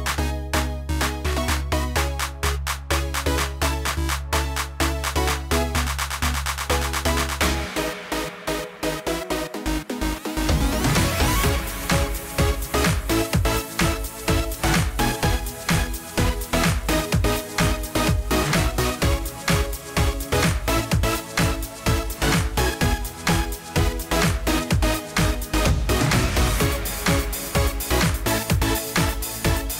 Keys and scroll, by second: 27.8 ctrl+t.